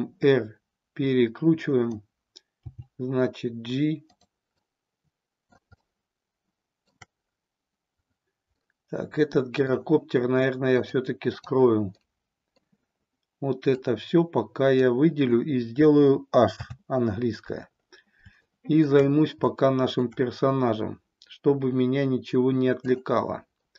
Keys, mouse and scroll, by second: 2.0 click, 2.7 g, 4.2 click, 4.6-5.7 middle drag, 5.8-7.0 shift+middle drag, 8.6-9.7 middle drag, 10.9 click, 12.0-12.6 middle drag, 13.6-15.0 drag, 16.5 h, 18.5-18.8 middle drag, 19.6-20.1 shift+middle drag.